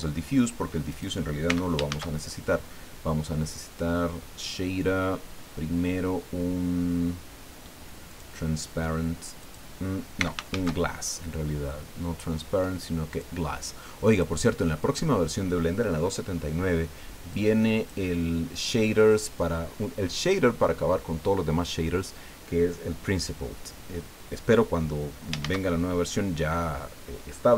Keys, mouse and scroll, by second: 0.9 right click, 1.5 x, 1.9 shift+a, 8.1 click, 9.4 click, 10.2 x, 10.5 shift+a, 13.1 click, 14.1 click, 14.4 middle click, 17.3 click, 25.4 shift+a.